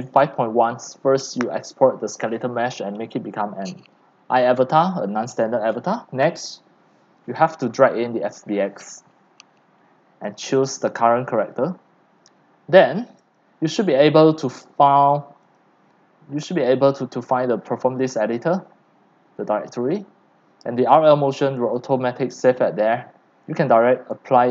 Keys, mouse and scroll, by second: 0.0-24.5 typing, 17.0-23.5 drag, 24.0 click.